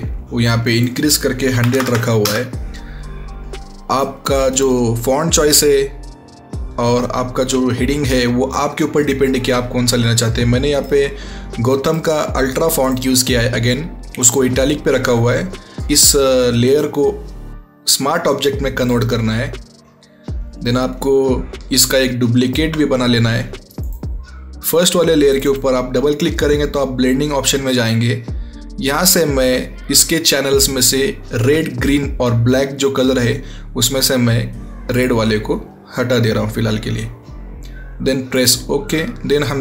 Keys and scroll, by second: 1.5 KP_1, 1.7 KP_0, 1.8 KP_0, 2.1 Return.